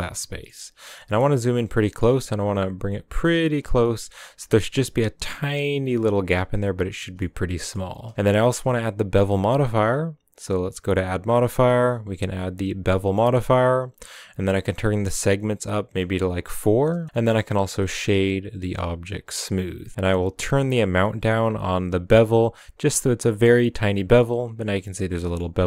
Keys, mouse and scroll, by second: 0.0 middle click, 0.5 scroll up 3, 0.9 shift+middle click, 1.1-1.7 scroll up 5, 1.7 g, 3.8 middle click, 4.0-4.4 scroll up 3, 4.4 g, 6.8 scroll down 5, 7.0-7.8 middle drag, 7.8 Tab, 8.1-9.6 scroll up 3, 12.4 click, 13.0 middle click, 13.2-14.6 scroll up 1, 14.8-16.3 drag, 16.3 scroll down 3, 16.5 middle click, 17.1 scroll down 1, 17.2-18.8 middle drag, 18.8 w, 19.1-19.6 scroll up 3, 20.3-22.8 shift+drag, 23.4 scroll down 5, 23.7-24.2 middle drag, 24.2-25.0 scroll up 6, 25.0 scroll down 2, 25.1 middle click, 25.4-25.6 scroll up 2.